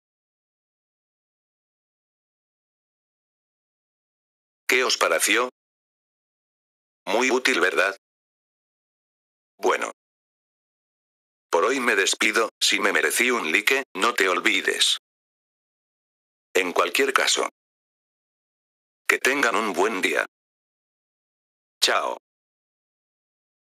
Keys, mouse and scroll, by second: 0.5 click, 4.0 F4, 4.6 click, 8.6 F4, 9.5 click.